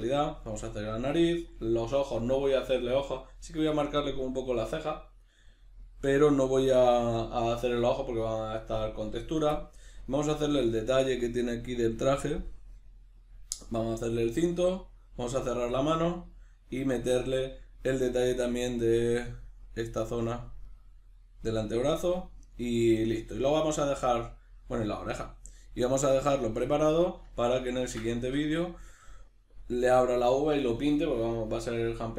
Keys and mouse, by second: 10.9 click, 19.3-23.4 middle drag, 27.4-32.1 ctrl+middle drag.